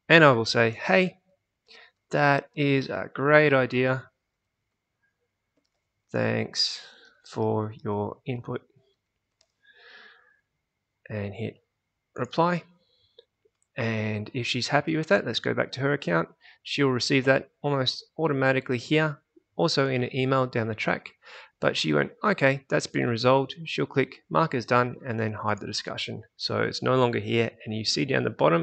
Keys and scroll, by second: 0.0-9.8 typing, 14.6 alt+Tab.